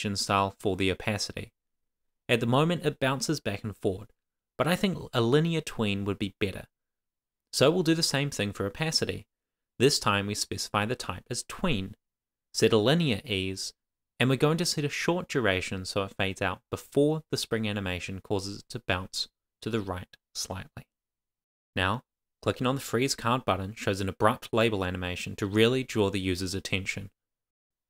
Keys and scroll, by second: 4.2 Return, 7.4 shift+;, 7.5 shift+space, 10.5 Right, 11.7 Return, 12.9 shift+;, 15.2 Right, 16.0 Return, 17.5 shift+;, 19.7 super+s.